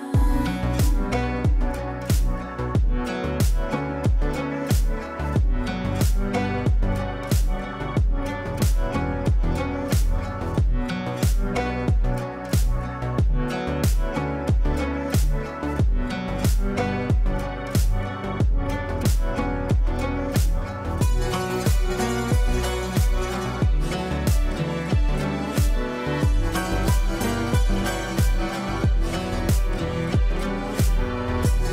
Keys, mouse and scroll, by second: 0.8 typing, 2.0 typing, 3.4-4.1 typing, 4.2 ctrl+space, 7.1 click, 9.4 click, 12.0-15.0 drag, 12.9 click, 15.0 shift+p, 16.3 ctrl+space, 17.5-19.4 shift+drag, 20.0 c, 20.8 click, 22.6 shift+c, 23.7 ctrl+z, 24.5 c, 25.1 click, 25.6 F2, 26.1-27.9 drag, 27.9-30.2 ctrl+drag.